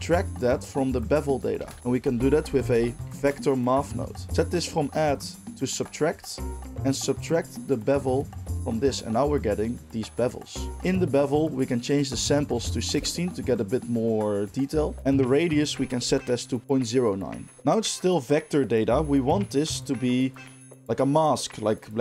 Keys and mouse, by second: 0.0-22.0 drag, 1.5 shift+a.